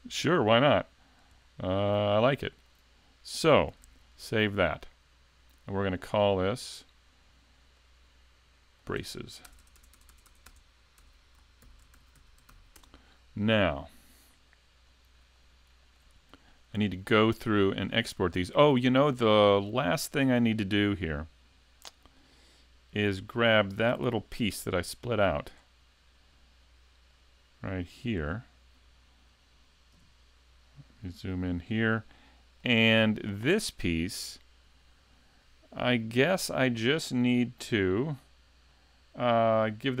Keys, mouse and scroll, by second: 25.0 click, 25.6-26.4 scroll down 3, 26.4-27.1 scroll down 2, 27.1 click, 28.2 right click, 30.0 KP_Decimal, 30.7 scroll down 1, 32.1 middle click, 32.9 shift+middle click, 37.6-40.0 scroll down 1.